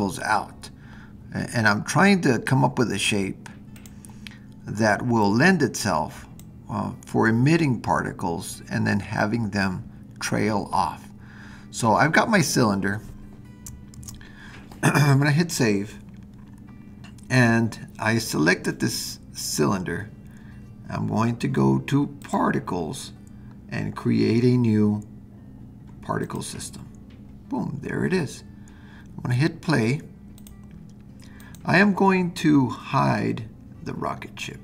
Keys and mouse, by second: 3.8 click, 5.2-6.4 drag, 14.0 super+s, 22.3 click, 26.2-30.3 drag, 30.4 click, 31.4 click.